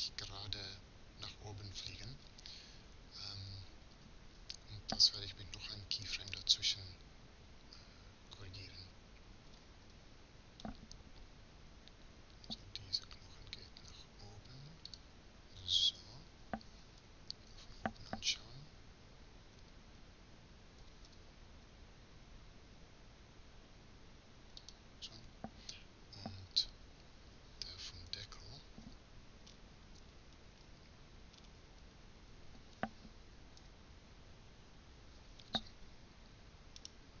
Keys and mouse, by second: 6.5-7.6 right drag, 9.2 r, 16.7 KP_7, 20.5 r, 27.7 KP_3, 33.3 KP_3, 34.3 KP_1, 37.1-37.2 drag.